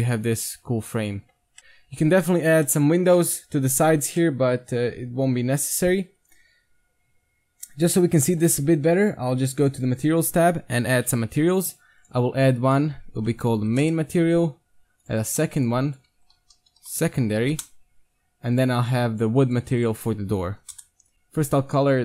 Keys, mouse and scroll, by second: 1.4 middle click, 1.6 ctrl+z, 1.6 s, 1.8 Tab, 2.3 Tab, 2.7 middle click, 3.4 Tab, 6.0 KP_1, 6.6-9.2 middle drag, 9.5 middle click, 9.6-11.4 drag, 12.0-14.8 drag, 15.0-17.7 drag, 18.6-21.1 drag, 20.6 o, 21.1 KP_1, 21.9-22.0 drag.